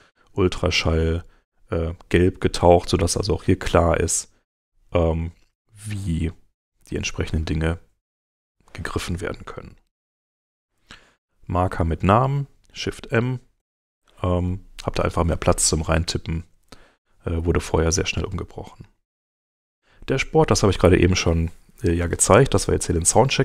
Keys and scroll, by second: 8.2 super+Tab, 11.9 super+Tab, 13.6 shift+m, 16.4 super+Tab, 20.5 super+Tab.